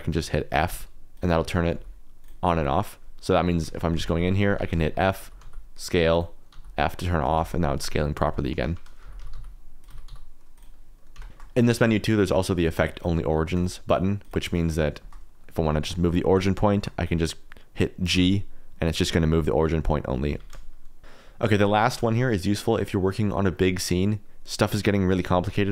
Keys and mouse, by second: 0.7 f, 1.1 click, 1.7 f, 2.2 click, 3.1 middle click, 3.9-5.4 typing, 4.4 Escape, 6.5 f, 7.2 s, 7.3 x, 8.6 Escape, 9.0-10.0 typing, 10.7 middle click, 11.2 Tab, 11.3 shift+middle click, 11.4 middle click, 11.9 middle click, 12.7 middle click, 12.9-14.6 middle drag, 15.0 shift+middle click, 15.3 middle click, 15.8 shift+middle click, 16.3 middle click, 16.7 shift+middle click, 18.1 g, 20.3 Escape, 21.0 middle click, 21.9 click, 22.2 click, 24.0 middle click, 24.2-25.7 middle drag.